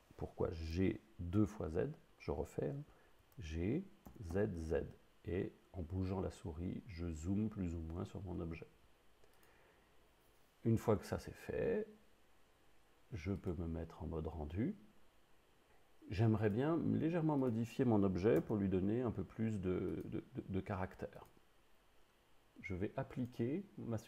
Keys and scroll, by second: 3.2 g, 4.1 z, 18.5 Tab, 22.5 Tab.